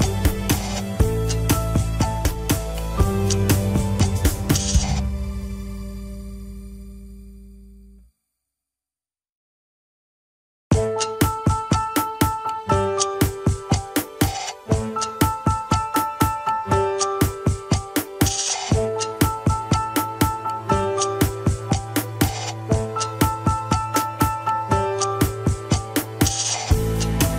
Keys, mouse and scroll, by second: 0.3 scroll down 2, 0.5 KP_1, 0.8 scroll up 2, 1.6 Tab, 2.0 scroll up 1, 2.8 click, 3.0 click, 5.4-6.5 drag, 6.7 scroll down 1, 7.0 shift+middle click, 7.9 shift+click, 9.0 ctrl+KP_Add, 9.1 ctrl+KP_Add, 15.3 alt+z, 16.1 alt+z, 17.3 Tab, 17.5 alt+z, 18.1 alt+z, 18.7 Tab, 23.7 click, 25.1 ctrl+z, 25.8 ctrl+z.